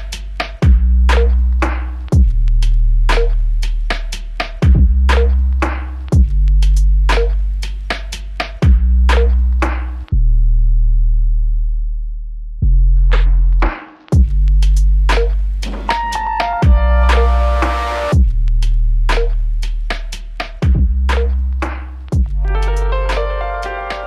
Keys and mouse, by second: 0.5 ctrl+alt+click, 1.0 shift+click, 3.0 alt+click, 7.2 r, 12.3 shift+click, 14.6 shift+click, 18.2 alt+click, 21.1 double click.